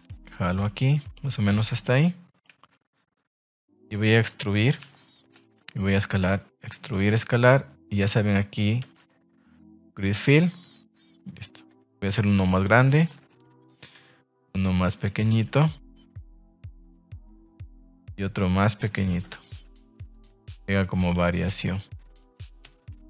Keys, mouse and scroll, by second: 2.5 z, 3.1-4.2 middle drag, 5.1 Escape, 5.4 middle click, 6.1 click, 6.2 e, 6.5 Escape, 6.8 s, 7.3 click, 7.6 middle click, 8.2 middle click, 8.8 space, 10.6 Tab, 10.9 middle drag, 11.7 KP_1, 12.3 shift+middle click, 13.1 shift+d, 13.6 click, 13.9 s, 14.4 click, 14.8 s, 15.1 click, 15.3 g, 16.8 click, 17.9 shift+s, 19.1 shift+d, 20.1 click, 20.3 s, 21.0 click, 21.1 g, 22.1 click, 22.8 a.